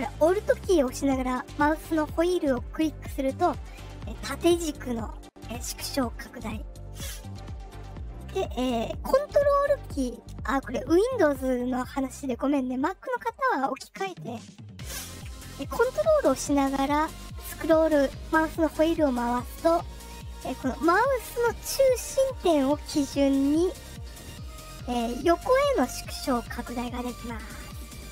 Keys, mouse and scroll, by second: 0.5 alt+middle click, 1.0 alt+middle click, 1.3 alt+middle click, 1.6 alt+middle click, 1.9-5.4 alt+scroll down 11, 5.7-6.2 alt+scroll down 2, 6.9 alt+middle click, 6.9-7.6 alt+scroll, 7.2 alt+middle click, 7.5 alt+middle click, 17.3-17.7 ctrl+scroll down 1, 18.3-18.7 ctrl+scroll down 4, 19.2-19.6 ctrl+scroll up 1, 26.6 ctrl+scroll down 2, 27.5-28.1 alt+scroll down 4.